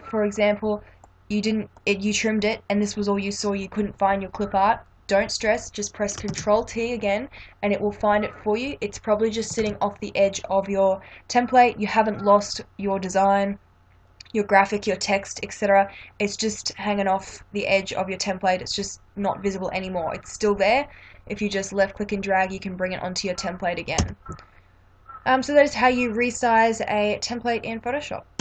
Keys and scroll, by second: 6.2 ctrl+t, 9.6 ctrl+-, 24.0 Return.